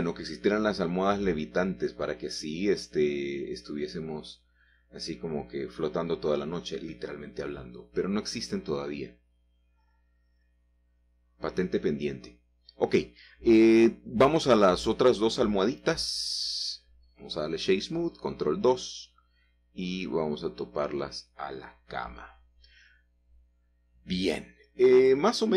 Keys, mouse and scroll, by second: 0.3 middle click, 1.1-1.7 scroll down 2, 1.7 scroll down 1, 1.8 shift+click, 6.7 shift+middle click, 8.6 g, 9.1 z, 11.8 shift+click, 12.2 click, 12.2-13.5 scroll down 1, 13.3 shift+middle click, 14.2 shift+middle click, 14.5-15.1 shift+scroll up 1, 14.6 shift+middle click, 15.1 shift+click, 16.5 middle click, 17.2 click, 18.3 ctrl+2, 19.2 shift+middle click, 19.3 shift+click, 19.4 shift+middle click, 19.7-20.8 shift+middle drag, 20.8 g, 21.7 g, 23.5-24.6 shift+drag, 25.1 click, 25.1 middle click.